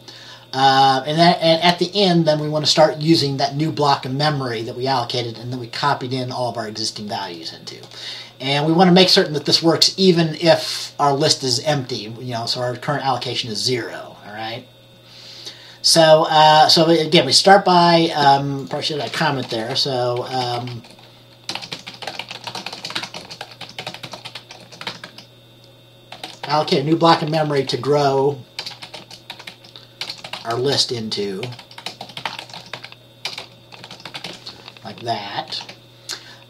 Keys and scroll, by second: 19.5 Return, 21.5-35.6 typing.